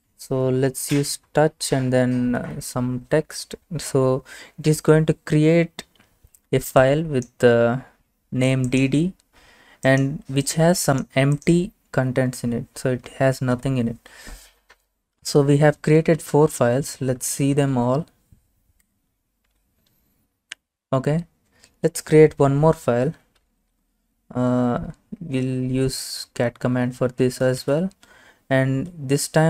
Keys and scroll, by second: 2.4 typing, 13.6 Return, 15.7-18.8 typing, 18.8 Return, 23.2-24.3 typing, 26.3 typing, 27.6-29.4 typing.